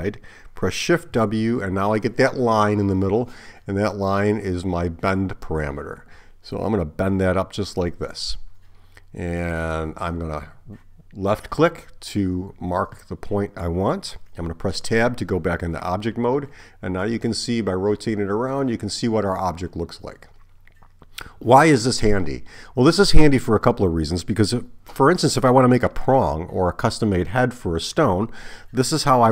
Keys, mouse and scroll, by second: 1.1 shift+w, 14.9 Tab.